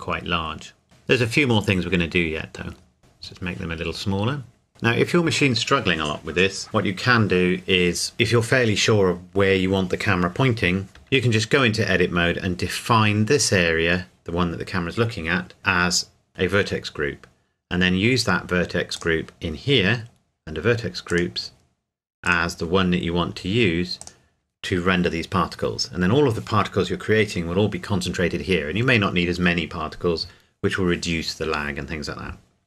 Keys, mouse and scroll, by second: 1.2-1.9 scroll down 1, 2.8 scroll up 1, 3.0 KP_Enter, 4.7-5.7 scroll down 1, 10.9 click, 11.0 Tab, 16.3 click, 19.0 click, 19.9-21.1 scroll down 1, 21.1 click, 21.6-22.2 scroll down 1, 22.2 click.